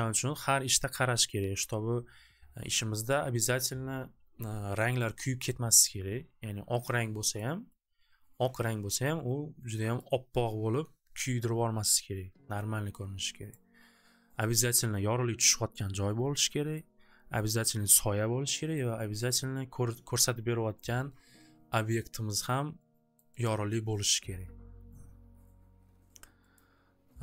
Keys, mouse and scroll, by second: 7.4 click, 9.0 click, 10.0 click, 10.4 right click, 13.5 click, 16.8 click, 18.8 click, 22.4 click, 23.2 click, 23.5 click, 26.5 click.